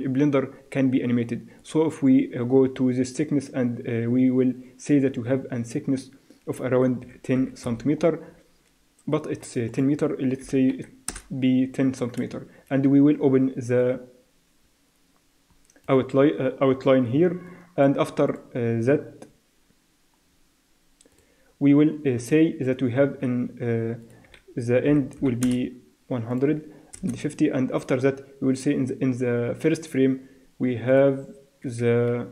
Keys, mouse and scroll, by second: 1.6-3.5 drag, 8.2-9.7 middle drag, 9.7-11.5 drag, 12.4-13.8 middle drag, 13.8-15.8 drag, 17.5 click, 24.0-26.0 drag, 26.3-30.2 drag, 30.9-32.3 drag.